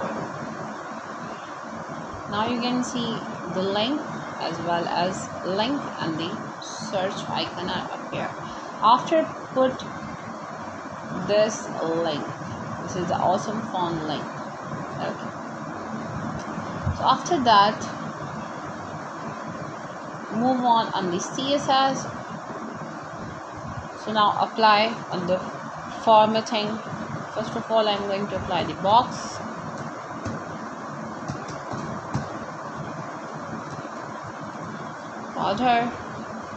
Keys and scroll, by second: 12.1-14.7 typing, 15.7 Return, 16.1 shift+[, 16.6 Return, 17.9-19.6 typing, 19.6 Return, 21.9-25.3 typing, 25.9 Return, 27.7 space, 31.6 shift+3, 34.8-36.5 typing.